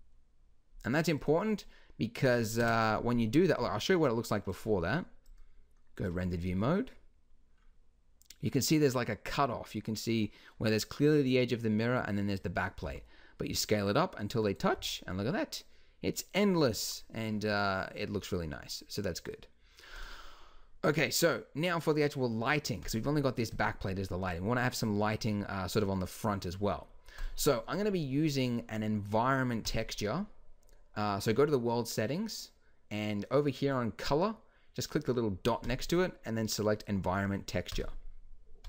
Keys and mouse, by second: 2.6 KP_0, 3.6 s, 12.9 s, 20.0-22.9 drag, 23.5-25.0 drag, 25.0-26.2 middle drag, 26.2 click, 27.2-28.5 drag, 29.6-33.2 drag, 35.6-37.8 drag, 38.6 click.